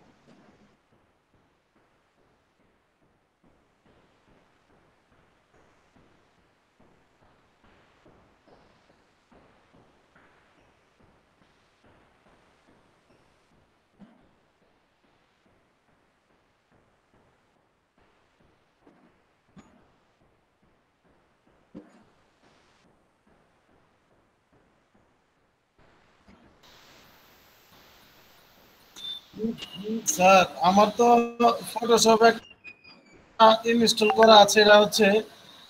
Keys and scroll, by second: 20.5 ctrl+a, 21.3 ctrl+c, 26.6 ctrl+v, 27.2 ctrl+Return.